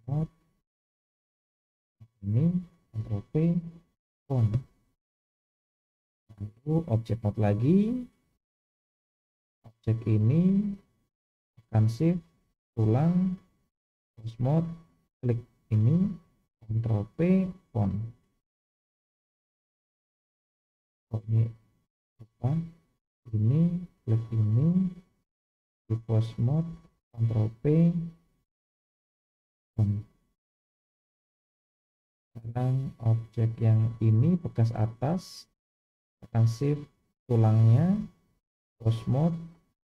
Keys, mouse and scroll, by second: 1.8 click, 3.0 ctrl+p, 6.2-6.8 drag, 7.7 click, 9.2-10.3 scroll down 3, 12.4 shift+click, 13.5-14.3 drag, 15.1 click, 16.7 ctrl+p, 19.1-19.8 drag, 21.2 click, 23.9 shift+click, 25.8-26.8 drag, 27.6 ctrl+p, 31.8 click, 32.8-33.3 drag, 34.1 click, 37.2 shift+click, 38.5-39.2 drag.